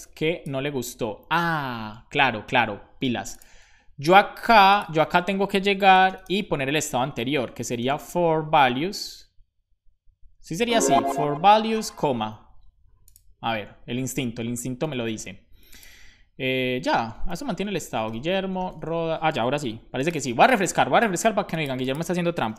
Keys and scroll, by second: 7.5-8.5 typing, 11.5 Return, 12.1 super+s.